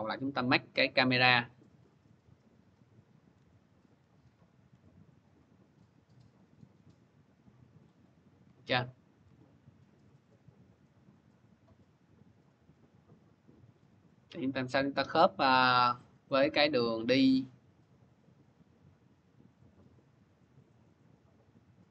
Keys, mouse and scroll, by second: 1.1 click, 2.1 c, 2.7-6.7 drag, 3.2-4.5 typing, 7.8 click, 8.0-9.1 typing, 12.8 c, 13.7 click.